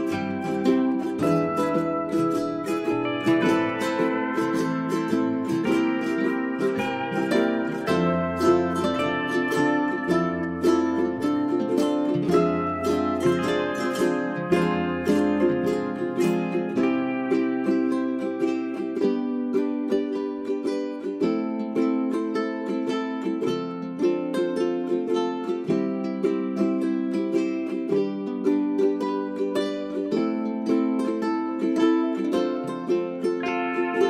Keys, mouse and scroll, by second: 0.4 Delete, 0.8 right click, 1.7-9.1 drag, 10.4 1, 10.9 click, 23.2 w, 24.1 click, 26.6 ctrl+a, 27.9-34.0 drag.